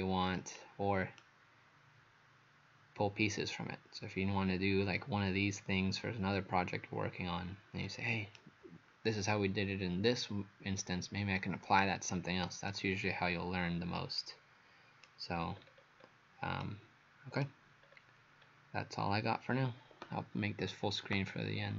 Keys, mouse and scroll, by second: 1.2 right click, 15.6-16.6 scroll down 4, 16.6 right click, 17.9-18.4 scroll down 2, 18.4 scroll up 1.